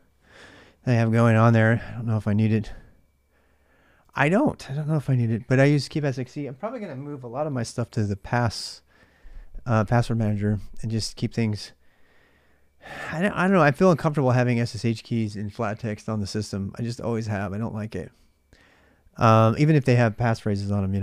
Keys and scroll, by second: 0.0-21.0 typing.